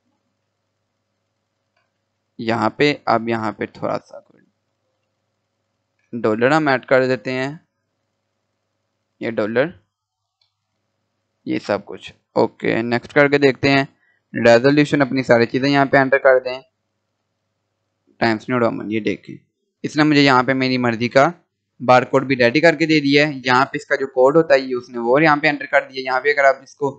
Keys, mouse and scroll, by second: 4.5 shift+5, 5.5 Return, 8.2 shift+4, 12.7 click, 16.2 click, 18.8-19.1 scroll down 1, 19.1-19.6 scroll up 1, 21.7-22.0 scroll down 1, 23.3 scroll up 1, 25.6 scroll down 1.